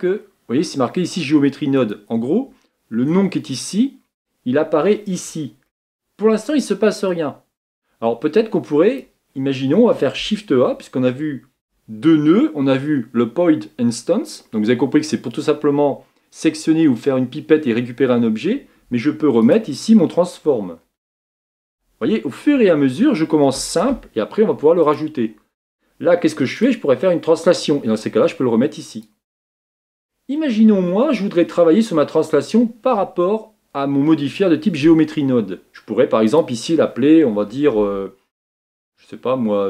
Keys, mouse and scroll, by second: 27.0-39.6 drag.